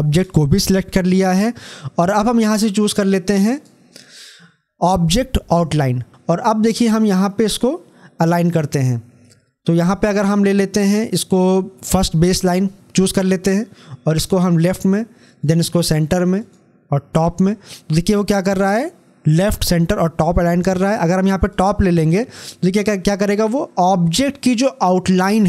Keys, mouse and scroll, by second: 3.3 click, 7.3 click, 11.8 click, 21.4 click, 24.5 click, 24.6 scroll up 1.